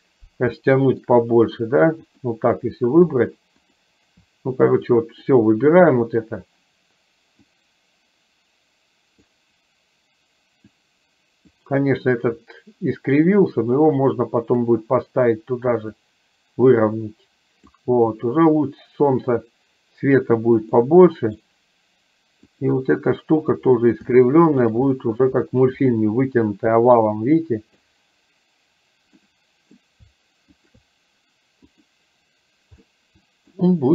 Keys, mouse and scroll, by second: 0.6 shift+middle click, 3.6 shift+click, 5.0 click, 7.5-9.4 drag, 10.8 click, 12.5-14.8 drag, 16.1-17.8 drag, 20.9 middle click, 22.6 click, 24.3 shift+middle click, 26.0-27.8 middle drag, 29.4 middle click, 30.8 shift+click, 33.0-33.5 middle drag.